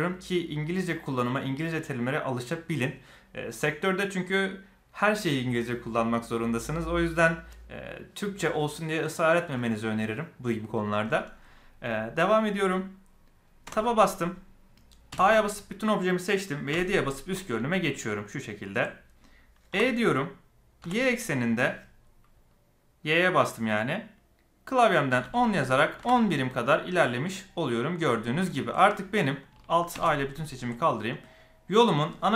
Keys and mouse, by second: 12.3 middle click, 13.6 Tab, 15.0 a, 17.3 KP_7, 18.0-18.7 shift+middle drag, 19.6 e, 27.2-28.0 middle drag, 28.4 shift+middle click, 28.8 middle click, 29.9 alt+a, 30.4 shift+middle drag, 30.7-32.3 middle drag.